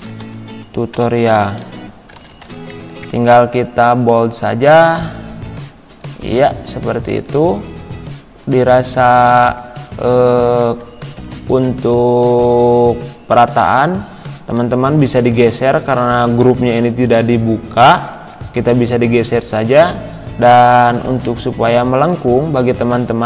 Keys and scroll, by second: 0.0-3.0 typing, 9.4 ctrl+z, 11.3 Left, 14.6 Down, 15.7 Left, 18.6 Up, 21.4 y.